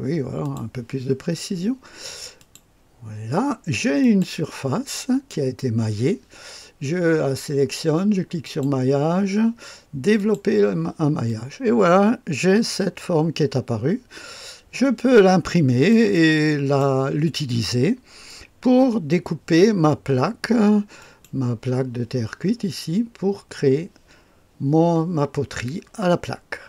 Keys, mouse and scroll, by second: 0.4 click, 2.3 click, 4.0 click, 8.4 click, 10.1 click, 11.2-15.9 drag, 16.1-17.1 middle drag, 20.9 click.